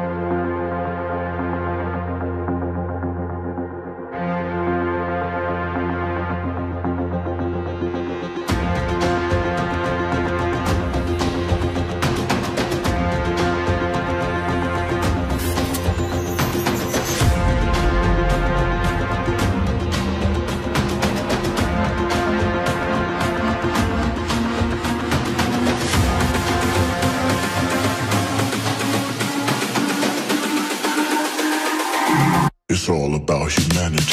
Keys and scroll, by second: 23.8 Delete.